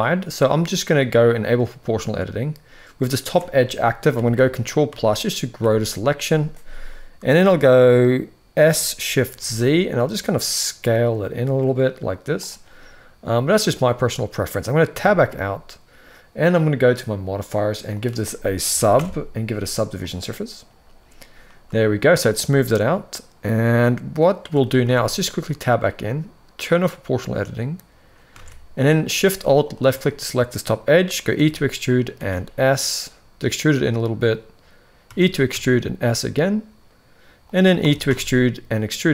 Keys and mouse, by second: 1.2 click, 3.9 ctrl+KP_Add, 4.1 ctrl+KP_Add, 4.6 ctrl+KP_Add, 5.3 ctrl+KP_Add, 8.4 s, 14.7 Tab, 17.4-20.0 drag, 21.5 shift+middle drag, 23.5-24.3 middle drag, 24.6 Tab, 24.9 middle click, 26.3 click, 28.1 alt+a, 31.2 e, 35.0 e, 37.7 e.